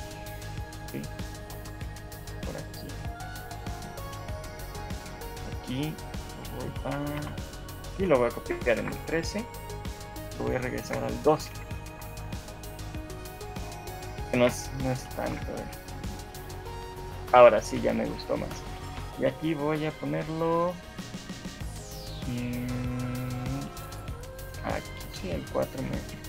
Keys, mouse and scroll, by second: 0.5 right click, 3.7 click, 4.3 scroll up 2, 4.5 shift+middle click, 7.3 Right, 9.3 ctrl+c, 9.3 Left, 10.9 ctrl+v, 11.5 Right, 11.9 Right, 12.3 Right, 12.9 Right, 13.3 Right, 14.1 Right, 14.1 ctrl+c, 14.5 ctrl+v, 15.3 shift+Left, 15.7 alt+a, 17.7 Escape, 18.9 right click, 25.5 shift+middle click.